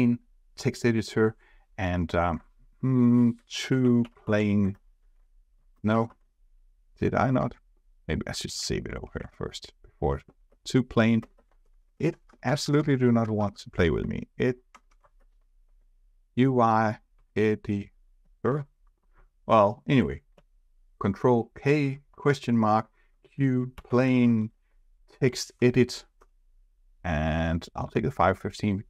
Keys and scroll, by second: 4.7 ctrl+space, 7.5 ctrl+Tab, 8.4 ctrl+s, 9.2 ctrl+Tab, 10.4 ctrl+space, 14.0 ctrl+space, 20.3 ctrl+k.